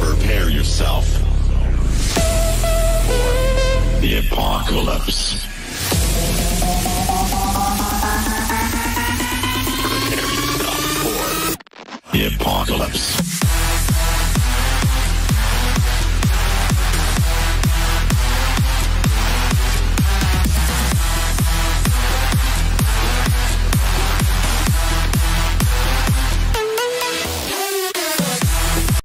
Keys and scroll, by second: 9.5 F4, 14.6 shift+Page_Up, 19.6 shift+F2, 20.0 Escape.